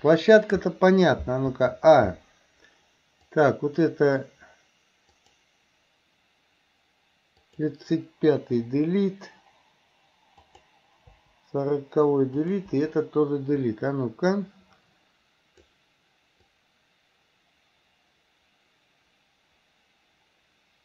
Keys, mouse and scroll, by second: 1.6 a, 3.3 click, 5.2 click, 7.5 click, 8.7 Delete, 10.4 click, 12.4 click, 14.3-15.7 drag, 16.6-20.8 drag.